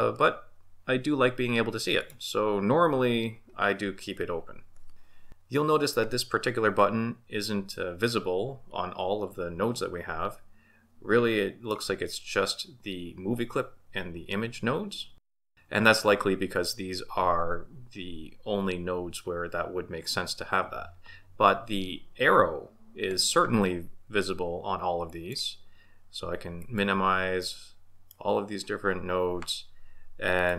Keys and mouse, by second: 2.0 click, 9.7-11.8 middle drag, 15.3 click, 25.1 click, 26.6 click, 27.4-28.2 middle drag, 30.3 click.